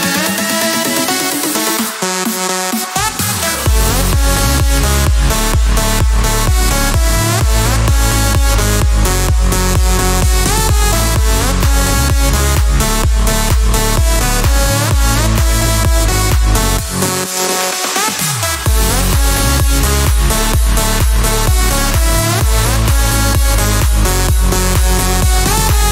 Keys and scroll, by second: 0.1 Escape, 7.3 Escape, 19.0 Escape.